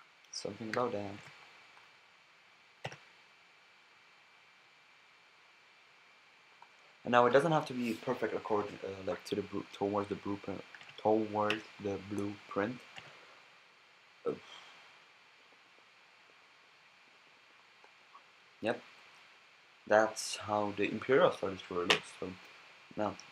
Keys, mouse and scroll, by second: 0.7 a, 1.2 b, 2.8 g, 6.6-8.4 drag, 7.4 a, 8.6 g, 9.9-10.9 drag, 10.8 g, 11.5 b, 12.9 g, 17.8-19.5 drag, 20.8-21.9 middle drag, 21.9 KP_1.